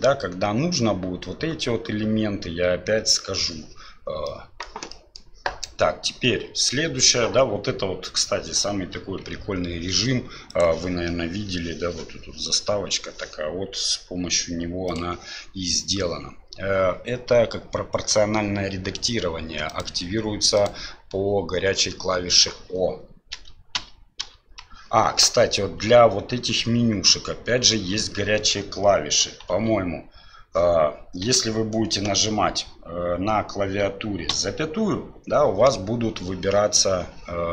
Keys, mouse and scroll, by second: 4.3-4.7 middle drag, 5.0 middle click, 9.4 KP_7, 19.7 click, 20.5-21.7 drag, 23.3 o, 23.8 o, 24.2 o, 30.9 ..